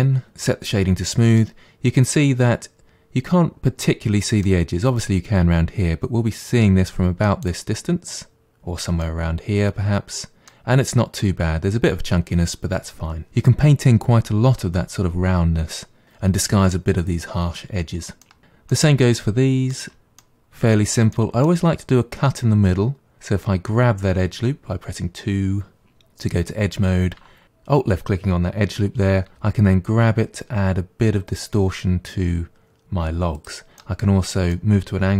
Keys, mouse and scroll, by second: 0.3-1.4 right drag, 1.4-4.4 middle drag, 6.0-7.2 scroll down 6, 7.2-8.4 middle drag, 8.4-9.0 scroll up 2, 9.0-12.0 middle drag, 18.2 middle click, 18.4 click, 18.7-19.8 middle drag, 19.8 Tab, 20.2-21.9 middle drag, 21.9-24.4 scroll up 1, 24.4 2, 29.3 g, 33.8-35.1 middle drag.